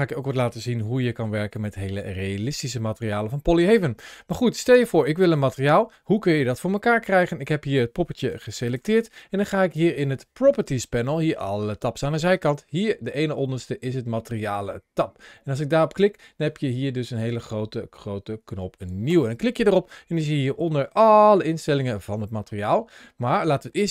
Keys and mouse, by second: 0.9 shift+middle click, 1.5 middle click, 2.1 shift+middle click, 2.7 middle click, 3.3 shift+middle click, 4.5-5.6 middle drag, 8.1 g, 8.5 click, 9.5 ctrl+shift+a.